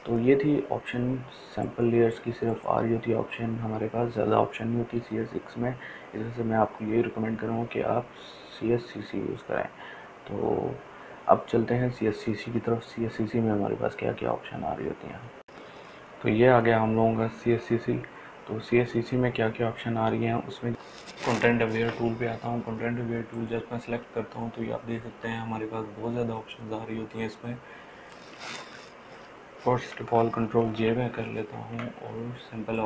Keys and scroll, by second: 31.0 ctrl+j.